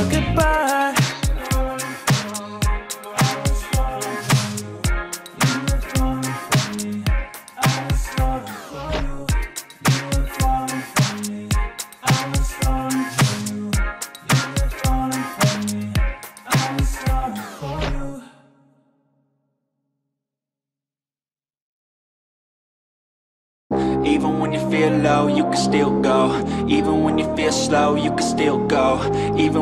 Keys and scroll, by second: 8.3 ctrl+d, 10.7 ctrl+t, 19.4 ctrl+t, 27.2 ctrl+j, 27.7 ctrl+t.